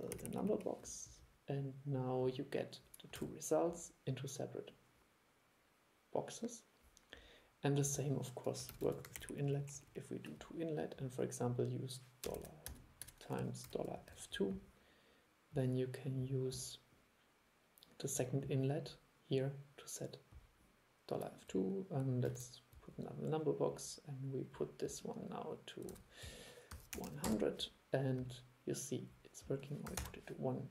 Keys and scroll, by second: 3.3 super+e, 8.8 super+c, 8.9 super+v, 22.4 super+3, 26.0 super+e.